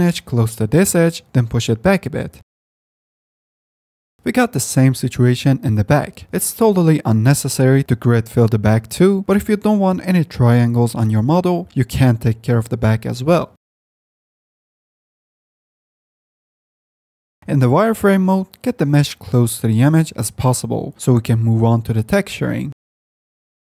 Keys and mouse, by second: 0.7 middle click, 1.5 g, 4.2 z, 4.7 click, 5.2 g, 7.3 click, 7.9 click, 8.1 Tab, 8.5 z, 8.9 middle click, 9.4 Tab, 9.9 1, 11.9 x, 12.4 2, 14.0 ctrl+f, 15.3 ctrl+z, 15.3 o, 15.5 g, 16.9 Tab, 17.1 ctrl+z, 17.1 w, 17.3-18.5 drag, 19.3 s, 23.0 ctrl+z, 23.3 o.